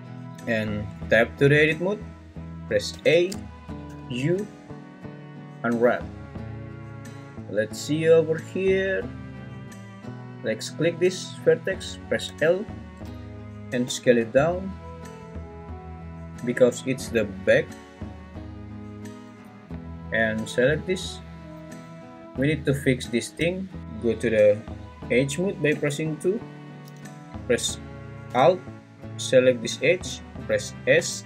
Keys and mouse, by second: 0.9 Tab, 2.9 a, 3.9 u, 12.3 l, 13.8 s, 25.8 2, 30.9 s.